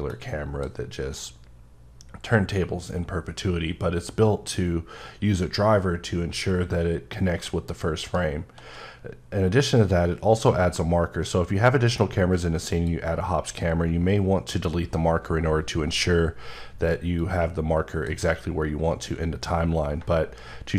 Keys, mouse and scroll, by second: 1.2 shift+right click, 12.6 click, 17.2 click.